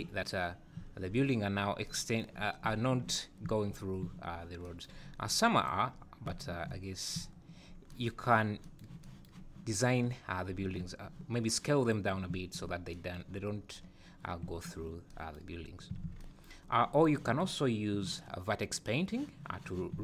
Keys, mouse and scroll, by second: 0.5 scroll up 2, 0.8 `, 4.0 `, 5.1 scroll up 3, 5.6 click, 6.0-6.4 scroll down 4, 6.8 scroll up 2, 8.3 scroll down 3, 9.7 click, 10.1 scroll up 3, 11.8 click, 12.3 `, 13.5 scroll down 2, 13.8 scroll up 5, 14.4 `, 15.6 scroll down 3, 15.7 `, 16.1 alt+a, 16.9 click.